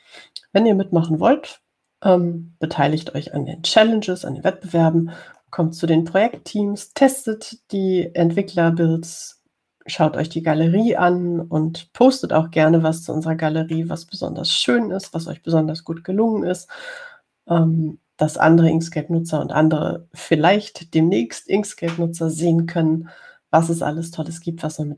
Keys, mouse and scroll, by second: 0.0 scroll down 2, 15.0-16.5 drag.